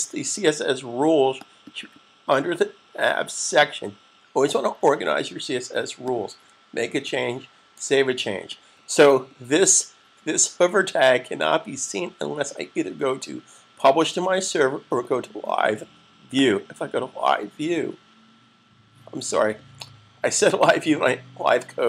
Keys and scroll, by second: 7.6 super+s.